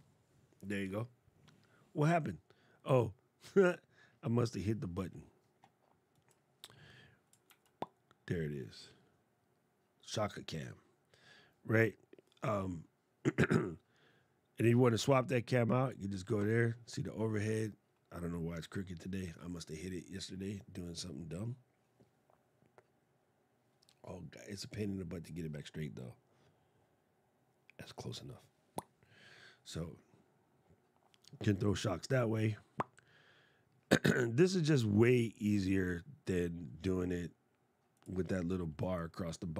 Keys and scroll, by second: 7.1 super+z.